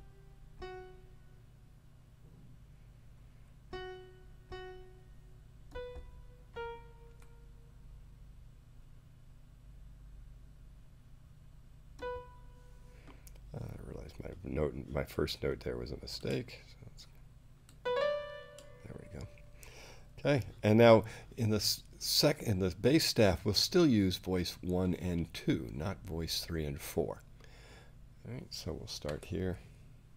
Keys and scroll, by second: 7.1 6, 29.1 5.